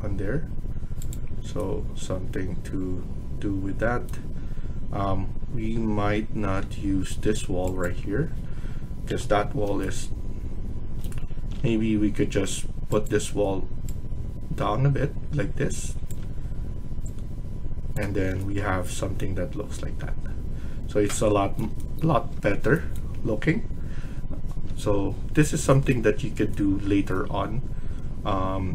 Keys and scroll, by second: 9.0 Delete, 11.5 ctrl+z, 17.9 Escape.